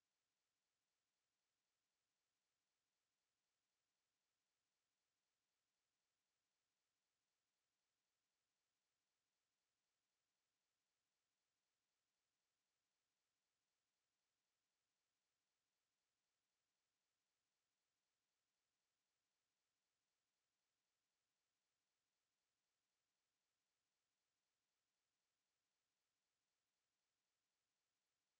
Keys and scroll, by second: 17.3 ctrl+4, 21.7 ctrl+4.